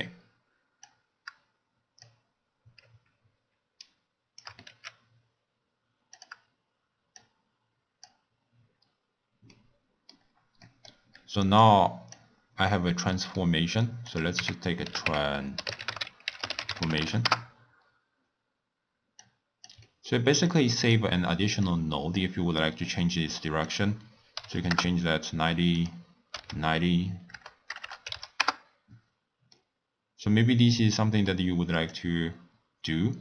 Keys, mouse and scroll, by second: 0.9 click, 3.8 shift+right click, 4.7 g, 7.2-8.8 drag, 8.8-9.6 scroll up 3, 9.6 middle click, 10.2-10.7 scroll up 2, 10.7 middle click, 11.6 click, 13.2-14.1 middle drag, 14.1-17.1 drag, 19.2 click, 19.9 middle click, 20.5 click, 21.1-21.7 scroll up 3, 21.7-27.8 drag, 27.8 BackSpace, 29.6-31.9 middle drag, 31.9-33.2 shift+drag.